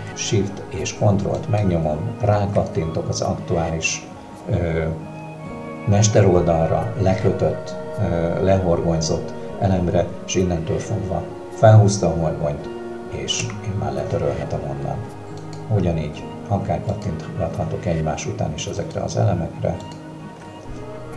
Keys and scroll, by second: 13.4 Delete.